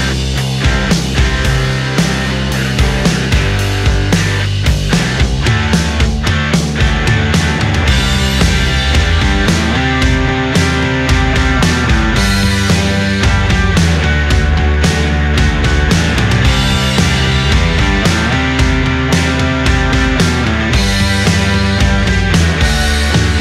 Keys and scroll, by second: 2.9 ctrl+z, 4.1 ctrl+z, 4.3 space, 4.8 ctrl+z, 5.7 ctrl+z, 5.8 ctrl+z, 8.9 space, 9.6 space, 16.8 ctrl+z, 19.9 space, 20.1 space, 20.4 ctrl+z, 20.6 ctrl+z, 21.5 space, 22.7 space, 23.0 space.